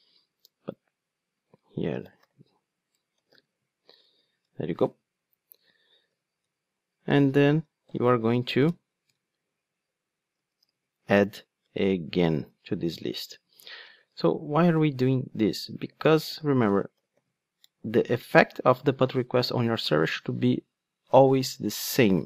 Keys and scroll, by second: 2.9 Return, 8.7 Return, 15.1 Return.